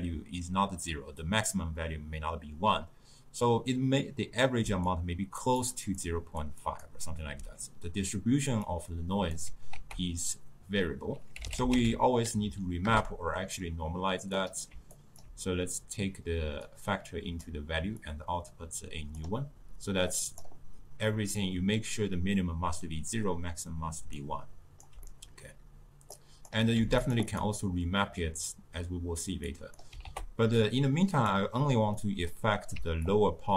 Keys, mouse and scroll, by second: 19.3 click, 24.3-32.2 right drag, 32.2-33.1 middle drag, 33.1-33.5 drag.